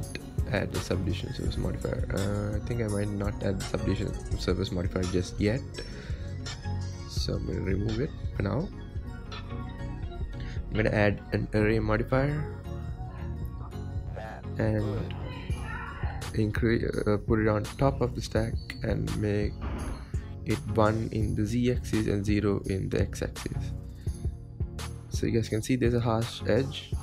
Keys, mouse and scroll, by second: 0.9 click, 2.0 click, 4.4-5.2 scroll up 6, 5.2 scroll down 4, 5.7-10.5 middle drag, 10.5 click, 11.3-12.4 middle drag, 12.4-15.1 drag, 15.1 KP_1, 18.0 click, 20.0 click, 20.7-24.9 drag, 24.9-27.0 shift+middle drag.